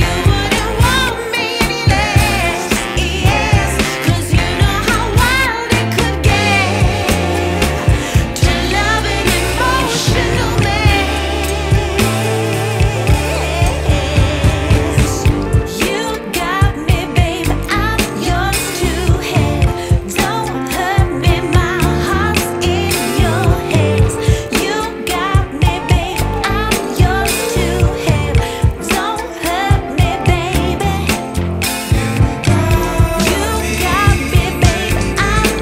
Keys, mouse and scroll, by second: 5.4-8.6 drag, 9.2-11.8 drag, 11.8 ctrl+s, 12.4-14.7 scroll down 2, 14.7-15.5 scroll down 1, 15.5 click, 15.8-16.4 scroll up 4, 16.4-21.3 drag, 21.3-22.3 scroll down 3, 22.3-24.5 drag, 24.5-25.4 scroll down 6, 25.4 click, 25.7-26.4 scroll down 1, 26.4-31.2 drag, 32.7-35.6 drag.